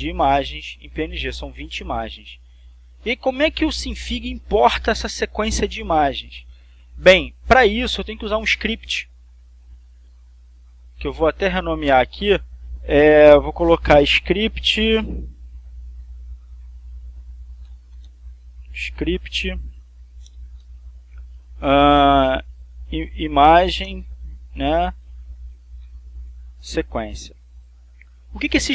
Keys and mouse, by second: 10.0 click, 10.9 right click, 12.1 click, 15.8 shift+s, 17.4-21.2 typing, 22.3-24.4 typing, 25.8-27.1 typing, 28.2 click.